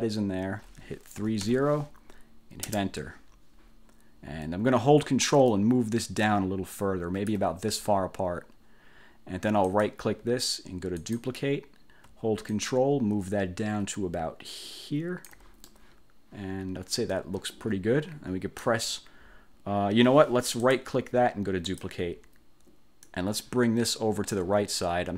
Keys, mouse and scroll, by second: 1.3 3, 1.6 0, 2.8 Return, 4.0 scroll down 2, 5.6-7.6 ctrl+drag, 8.5-9.0 scroll down 2, 9.8 click, 11.1 click, 12.6-15.6 ctrl+drag, 15.8-18.9 ctrl+drag, 20.7 click, 21.8 click, 23.2-24.6 drag.